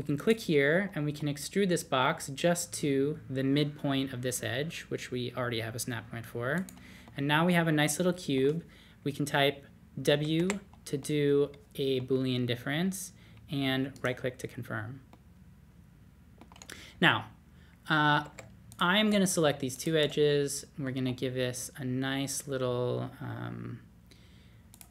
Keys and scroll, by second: 10.4 w, 18.2 2, 21.0 d.